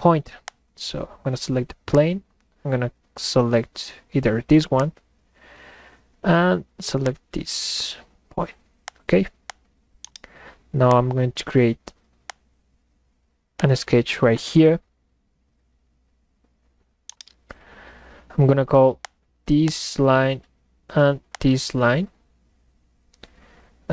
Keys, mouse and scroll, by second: 0.5 click, 4.8 click, 7.1 click, 8.9 click, 9.5 click, 10.0-10.7 middle drag, 10.0-10.7 right drag, 10.9 click, 12.3 click, 13.6 click, 17.0-17.5 middle drag, 17.7 middle click, 19.1 click, 19.7 click, 21.3 ctrl+click.